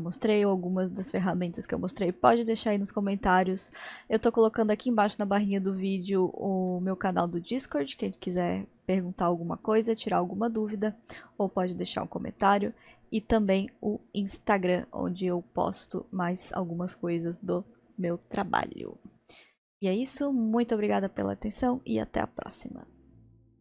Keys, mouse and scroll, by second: 6.7-11.5 middle drag, 13.5-14.9 middle drag, 14.9-15.9 scroll up 1, 15.9-16.5 scroll down 1, 16.5-19.5 middle drag, 19.6-22.7 middle drag.